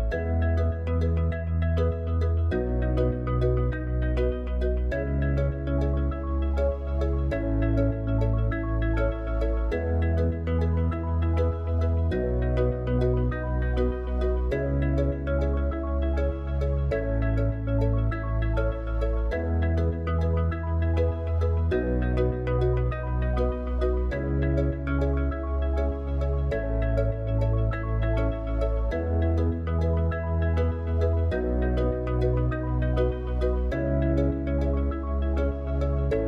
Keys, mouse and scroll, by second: 1.4 click, 19.3 click, 23.0 click, 24.2 click, 25.5-33.3 drag, 34.2-36.2 drag.